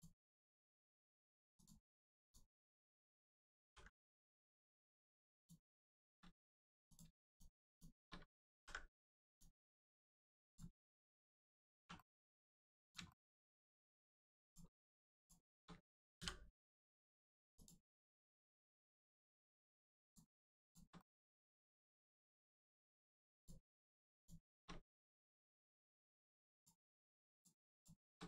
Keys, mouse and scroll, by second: 0.2 shift+middle click, 1.5 shift+click, 2.2 shift+click, 2.5 middle click, 3.6 ctrl+e, 5.3 click, 5.8 shift+middle click, 6.8 middle click, 6.9 click, 7.2 shift+click, 7.6 shift+click, 8.5 ctrl+e, 9.2 click, 9.6 middle click, 9.9 Tab, 10.4 click, 10.5 Tab, 10.9 middle click, 11.7 1, 11.9 middle click, 12.8 click, 13.0 shift+middle click, 13.3 scroll up 1, 13.7 middle click, 14.4 click, 15.1 shift+click, 16.1 click, 17.5 click, 17.9 middle click, 18.8 shift+middle click, 19.2 middle click, 19.3 middle click, 20.0 click, 20.6 shift+click, 20.9 middle click, 21.5 scroll up 1, 21.8-22.3 scroll down 1, 22.7 shift+middle click, 23.3 middle click, 24.1 shift+click, 25.7 m, 26.5 click, 27.7 shift+click.